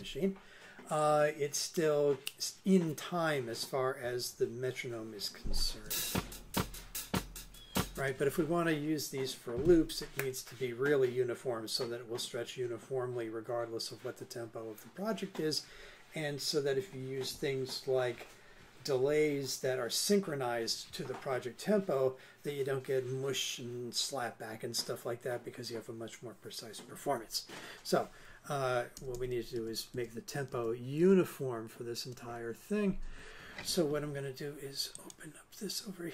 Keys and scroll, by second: 5.8 space, 28.9 super+Left.